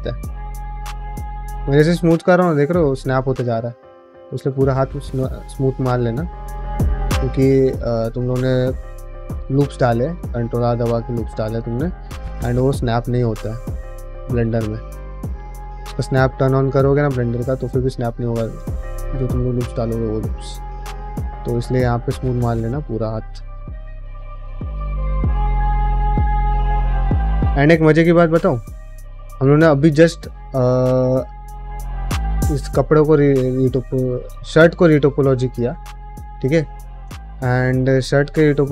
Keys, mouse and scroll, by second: 28.5 middle click, 28.8 ctrl+Tab, 29.4 shift+middle click, 30.8 click, 31.3 middle click, 31.8 middle click, 32.1 ctrl+middle drag, 32.5 shift+middle drag, 32.9 middle drag, 33.2 shift+middle click, 34.3 click, 36.8 middle drag, 37.4 q.